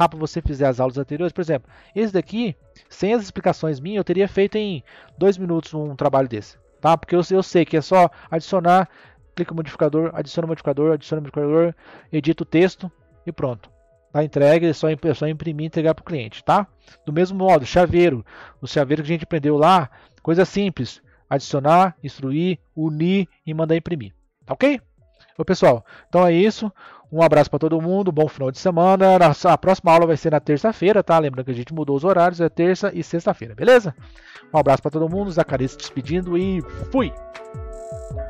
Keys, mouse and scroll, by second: 0.1-3.2 middle drag, 16.8-18.8 scroll down 2.